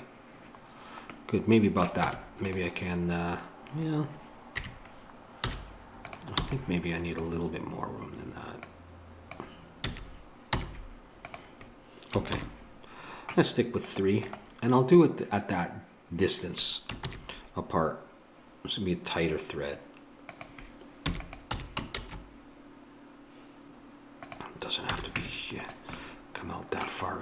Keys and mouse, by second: 2.1 Tab, 4.6 KP_3, 5.5 z, 6.4 b, 8.6 click, 9.8 click, 9.8 a, 10.5 z, 12.3 ctrl+r, 17.1 ctrl+b, 24.9 a, 25.2 Tab.